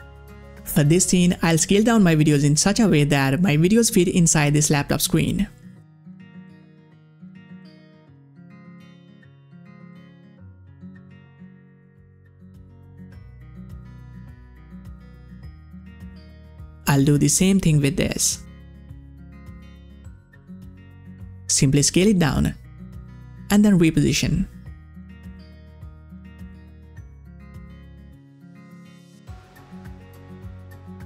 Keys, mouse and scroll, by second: 9.9-13.6 drag, 14.8-17.9 drag, 18.0-21.6 drag, 21.6-31.0 drag.